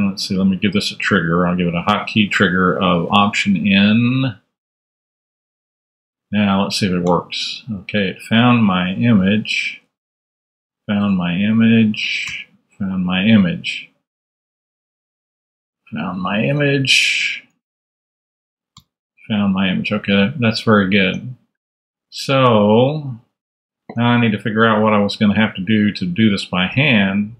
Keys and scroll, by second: 5.2 super+Tab, 7.0 alt+n, 9.3 Down, 9.9 alt+Down, 10.1 alt+n, 11.7 alt+Down, 12.2 alt+n, 14.4 Down, 15.0 alt+Down, 15.2 alt+n, 17.7 Down, 18.4 alt+Down, 18.7 alt+n, 19.8 alt+Up, 20.9 super+Up, 21.0 super+Tab, 23.7 super+Tab.